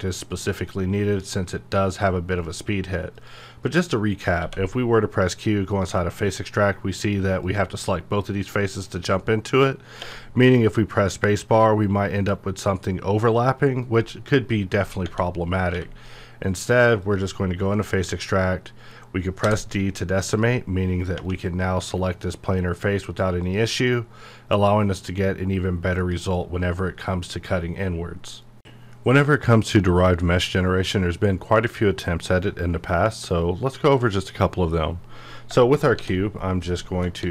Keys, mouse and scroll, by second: 2.4 typing, 4.4 q, 5.7 click, 10.0 space, 13.8 space, 13.8 right click, 15.1 Tab, 17.0 click, 20.3 click, 21.2 space, 23.4 click, 26.0 click, 37.0 shift+Num_Lock, 37.2 shift+d.